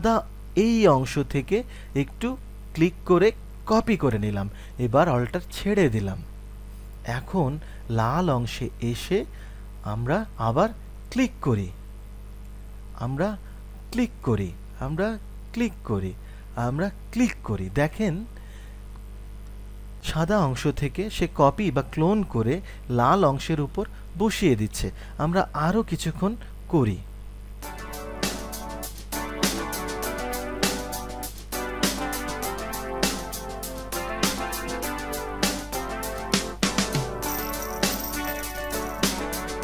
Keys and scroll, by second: 14.3-14.8 typing.